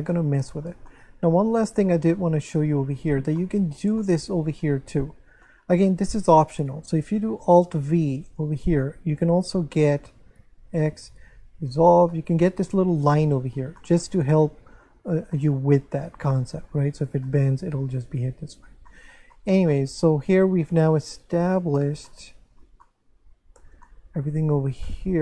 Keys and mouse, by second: 0.1 shift+middle click, 3.0 Tab, 3.4 shift+middle click, 5.4 shift+middle click, 6.6 right click, 7.9 alt+v, 8.7 click, 9.1 shift+right click, 10.4 x, 10.7 click, 11.6 Tab, 12.1 middle click, 13.3 middle click, 17.2 middle click, 18.9 middle click, 22.1 middle click, 23.8 shift+middle click.